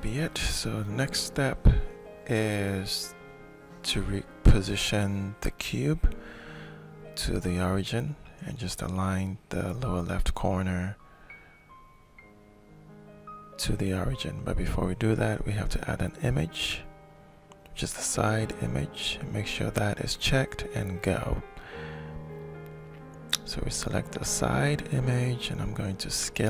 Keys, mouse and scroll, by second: 2.6 alt+shift+click, 6.8 click, 9.8 shift+click, 10.2 shift+click, 12.7 click, 14.0 click, 15.8 click, 19.7 click, 22.5 click, 22.7 click, 25.7-26.4 shift+middle drag.